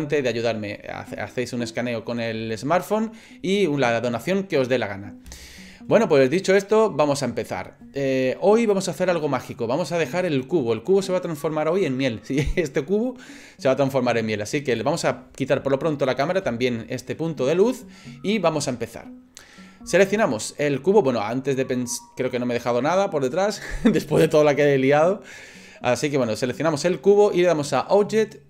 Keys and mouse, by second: 14.6 click, 15.6 Delete, 16.1 click, 26.4 right click, 27.8-28.4 drag.